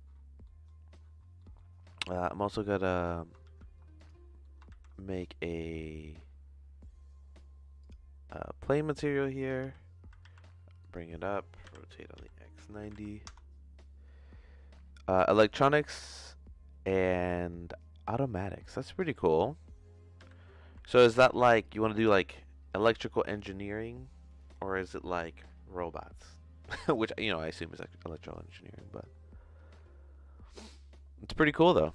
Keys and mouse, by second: 0.4 middle click, 1.4 middle click, 2.3 shift+middle click, 2.9 click, 3.4 shift+s, 4.4 middle click, 4.5 click, 4.7 shift+a, 9.6 g, 11.6 r, 18.7 middle click, 19.3 click, 20.1 g, 27.0 click, 28.2 click, 30.9 middle click, 31.5 middle click.